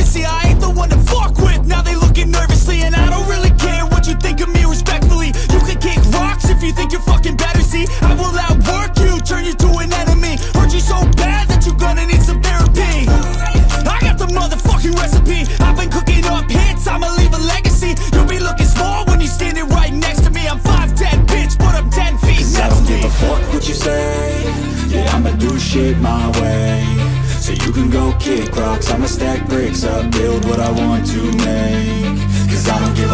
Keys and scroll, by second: 1.4 ctrl+a, 1.8 ctrl+a, 26.8-27.3 typing, 28.8-30.2 typing.